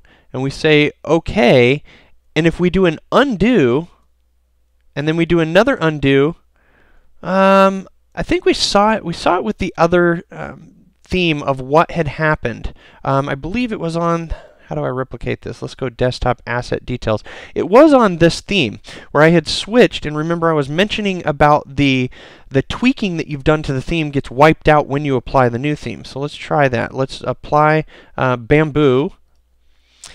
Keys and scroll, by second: 3.9 super+z, 26.0 super+z.